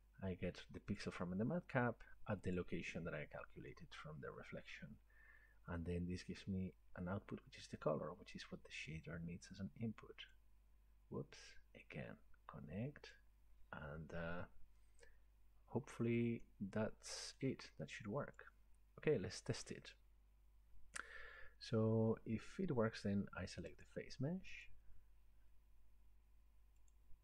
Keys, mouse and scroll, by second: 1.0 click, 2.4 scroll, 2.6 click, 4.5-5.1 scroll, 10.3-15.3 drag, 15.8-16.7 scroll down 1, 16.7-17.2 scroll down 2, 17.4 middle click, 18.4 click, 21.1 scroll, 23.9 click, 26.9 click.